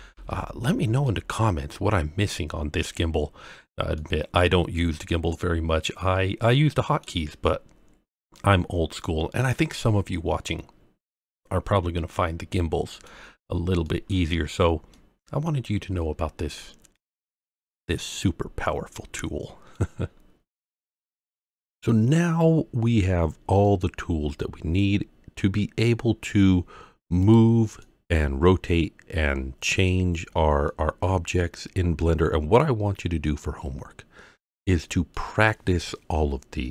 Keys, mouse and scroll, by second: 0.1 alt+r, 1.0-2.8 middle drag, 3.1-3.9 scroll up 1, 3.9-7.0 middle drag, 3.9 scroll up 1, 8.3 click, 11.6-13.0 middle drag, 13.3 scroll up 2, 13.8 middle click, 14.1-14.6 scroll down 2, 14.9-19.7 middle drag, 22.6-23.7 scroll up 4, 23.7-24.8 middle drag, 27.2 click, 27.8-29.9 middle drag, 30.2-30.8 scroll down 3, 30.7-32.6 middle drag, 33.7 scroll up 1, 34.5 scroll down 2, 35.1-36.7 middle drag.